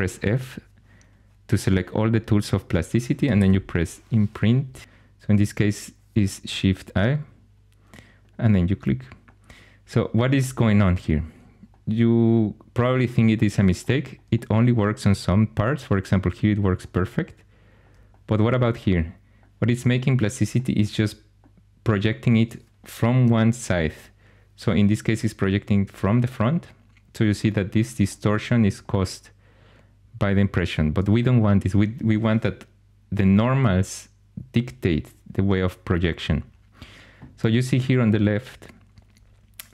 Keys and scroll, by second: 2.9-4.8 typing, 4.5 Page_Down, 4.7 Page_Down.